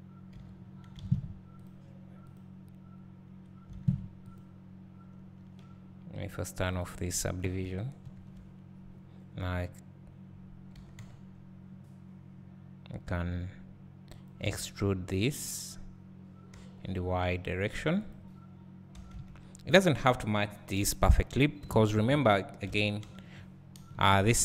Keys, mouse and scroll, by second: 0.5 j, 1.0 alt+a, 1.6 click, 3.7 alt+a, 4.4 click, 6.7 click, 8.1 KP_Add, 14.1 g, 14.4 e, 18.1 click, 19.0 s.